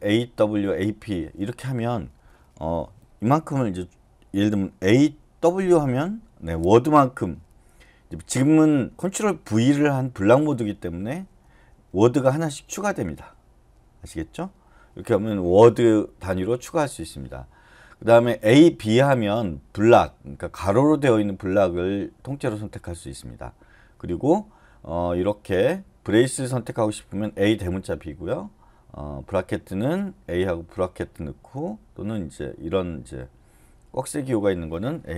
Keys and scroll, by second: 4.9-6.0 typing, 11.1-12.8 typing.